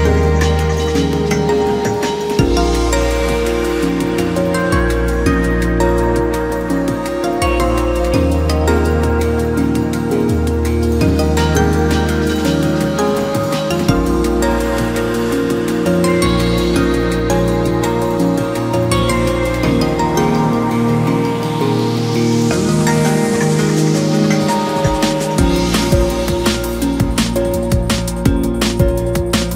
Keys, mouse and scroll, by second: 0.3 click, 0.9 click, 2.6-3.3 scroll down 1, 3.3 a, 4.0 KP_3, 5.5 click, 7.7 click, 8.9 click, 9.8-12.1 drag, 12.1-12.9 scroll down 1, 12.9 shift+middle click, 13.8 g, 20.9-21.4 scroll up 1, 21.4 shift+middle click, 21.9-22.4 scroll up 1, 22.4 o, 23.6 shift+d, 27.0 e.